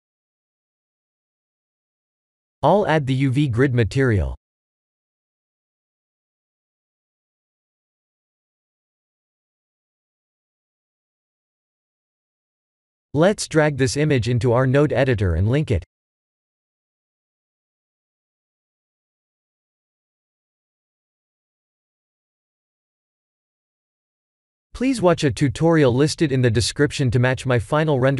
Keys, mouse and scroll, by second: 1.7 click, 2.8 click, 5.2 click, 6.7 click, 15.0 click, 16.8 click, 20.1 KP_0, 25.6 click, 26.4 middle click, 27.3 middle click, 27.7-28.1 scroll down 2.